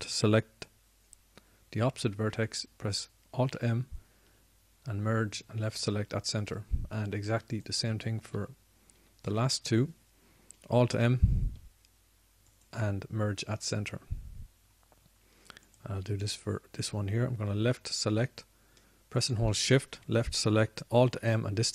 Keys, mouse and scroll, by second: 4.5 alt+m, 12.2 alt+m.